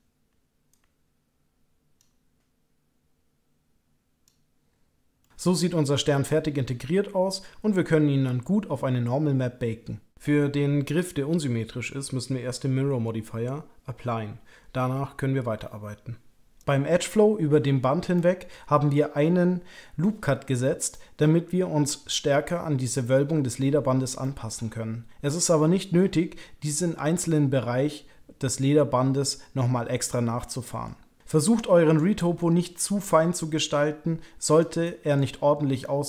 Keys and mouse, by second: 0.7-2.0 ctrl+drag, 2.4-4.2 ctrl+drag, 5.2 middle click, 5.5-9.8 middle drag, 10.1-11.1 middle drag, 11.4 shift+middle click, 12.0 middle click, 13.4-16.0 middle drag, 16.6 middle click, 18.1 middle click, 20.9 middle click, 21.4 middle click, 24.2-26.1 middle drag, 30.4 middle click, 31.2 click, 32.1 middle click, 33.3-34.8 ctrl+drag, 34.8 middle click, 35.8-36.0 ctrl+drag.